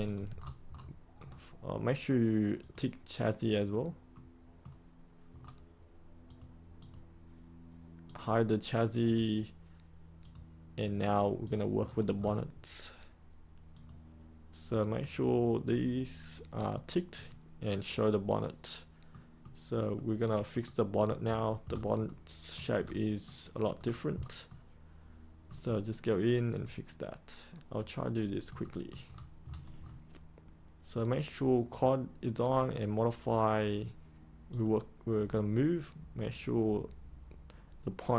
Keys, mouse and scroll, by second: 0.0 click, 0.3-1.4 scroll down 1, 2.6 click, 4.1 middle click, 5.2-6.2 scroll down 1, 6.2 click, 11.8-12.1 scroll up 1, 13.7 click, 19.0 middle click, 21.2-22.0 scroll up 1, 22.0 middle click, 22.7 scroll up 1, 23.2 middle click, 23.7-24.4 scroll down 1, 24.4-25.6 middle drag, 26.5 click, 27.9 middle click, 29.0-30.2 scroll up 1, 31.6 click.